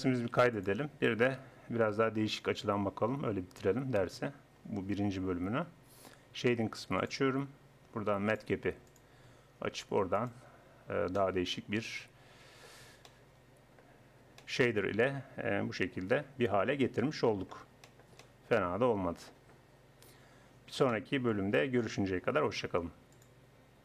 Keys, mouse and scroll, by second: 0.2 ctrl+s, 1.4 n, 7.0-10.8 drag, 11.2 middle click, 14.6-16.4 middle drag, 17.9 middle click, 19.2 middle click, 20.2-21.7 middle drag.